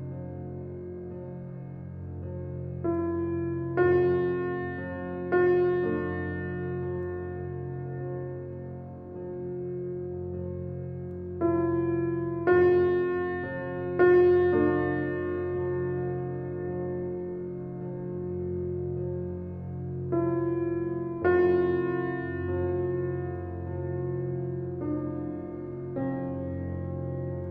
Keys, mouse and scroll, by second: 1.4 alt+right click, 1.9 alt+click, 2.1 alt+right click, 3.1 alt+click, 3.6 right click, 4.6 alt+click, 5.3 alt+right click, 5.6 alt+click, 6.4 alt+right click, 7.0 alt+middle click, 7.5 alt+right click, 8.7 click, 17.5 click, 18.8 alt+click, 19.9 alt+right click, 20.4 alt+click, 20.7 alt+middle click, 21.4 click, 21.8-23.1 right drag, 23.1 click.